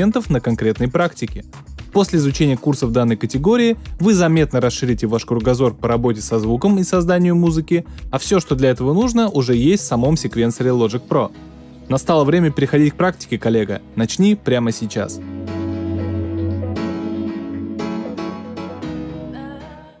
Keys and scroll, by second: 1.9 space, 2.6 space, 5.2 space.